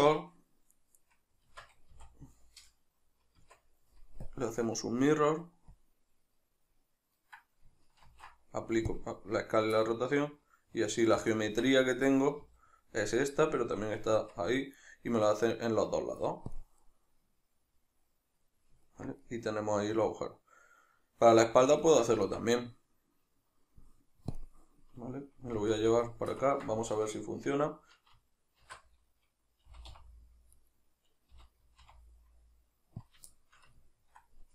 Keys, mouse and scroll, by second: 1.5 Tab, 8.1 ctrl+a, 9.8-16.6 middle drag, 11.5 Tab, 16.6-17.0 drag, 17.0-24.4 middle drag, 22.2 Tab, 24.4-25.6 drag, 25.6 alt+q, 26.0-30.8 shift+middle drag, 28.7 shift+d, 30.8 right click, 31.4 g, 33.2 click, 33.4-34.5 shift+middle drag.